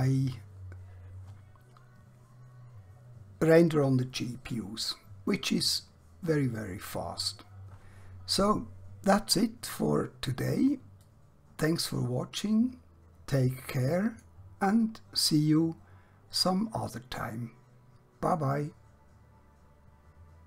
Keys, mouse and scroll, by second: 11.3-14.3 drag.